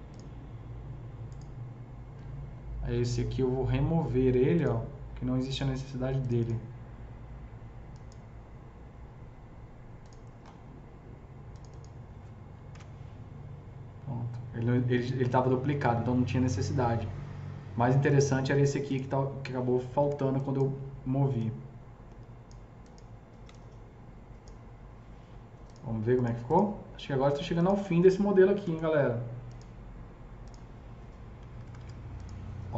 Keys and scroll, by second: 12.8 ctrl+BackSpace, 20.0 F3, 21.2 s, 28.0 F2, 28.5 F3, 28.7 F2, 31.3 F3, 31.7 F3, 31.7 F4.